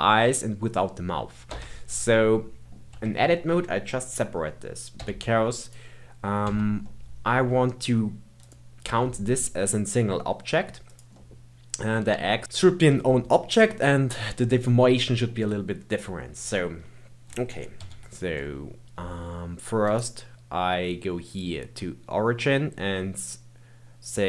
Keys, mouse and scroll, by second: 2.1-2.9 middle drag, 2.9 Tab, 5.0 p, 6.4 Tab, 6.8-8.4 middle drag, 8.4 click, 8.8 g, 11.1-12.4 middle drag, 12.4-13.0 scroll up 2, 13.0-17.7 shift+middle drag, 17.7 KP_1, 19.9-24.2 right drag.